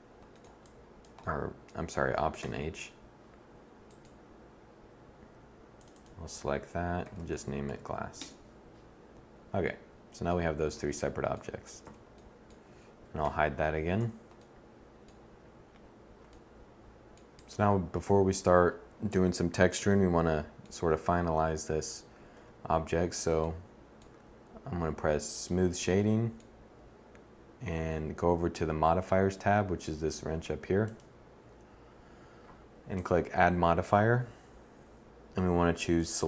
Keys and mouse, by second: 0.2-1.8 drag, 2.0 alt+h, 3.4-5.1 drag, 7.5 s, 11.4 z, 12.9 h, 13.5 z, 21.9 1, 35.6-36.2 middle drag.